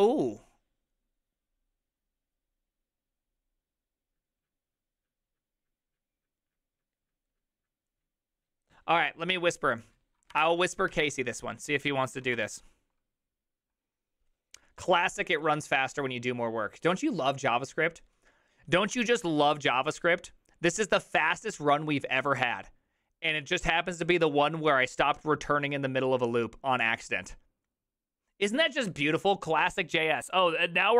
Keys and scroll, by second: 11.0 ctrl+c, 11.0 alt+{, 12.2 ctrl+a, 12.4 3.